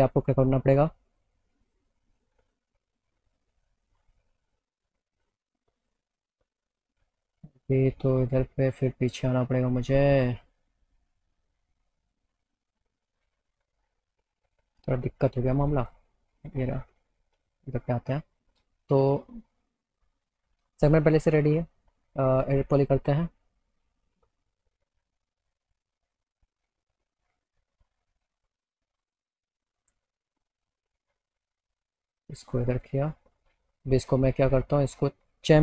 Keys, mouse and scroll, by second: 1.1 click, 5.9 click, 7.4 click, 8.2 click, 14.9-16.0 drag, 22.4 click, 24.5 e, 25.7 click, 28.1 click, 30.2 click, 30.4 click, 31.4-32.9 drag, 33.8 click.